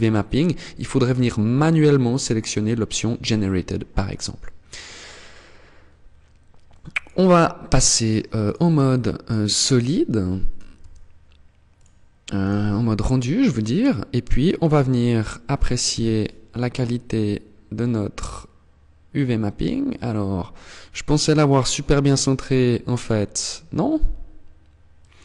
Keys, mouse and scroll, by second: 6.0 click, 7.8 click, 10.1 Tab, 11.1 click, 15.0 KP_0, 16.8-17.3 scroll up 2, 18.5 scroll up 1, 21.7 middle click, 22.5-22.9 scroll up 4, 24.3 click.